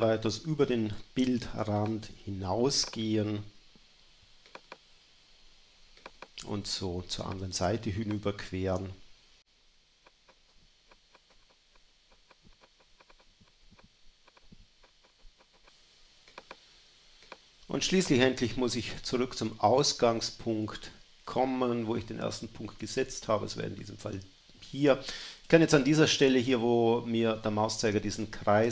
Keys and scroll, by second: 1.3 space, 7.0 space, 10.2 space, 11.2 space, 12.0 space, 12.9 space, 14.2 space, 14.5 BackSpace, 16.9 space.